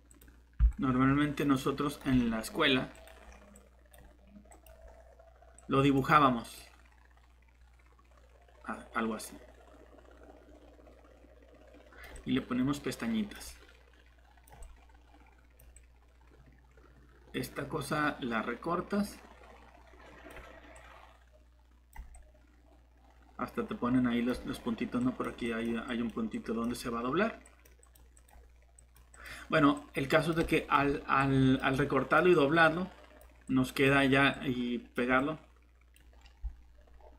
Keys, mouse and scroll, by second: 1.1-2.0 typing.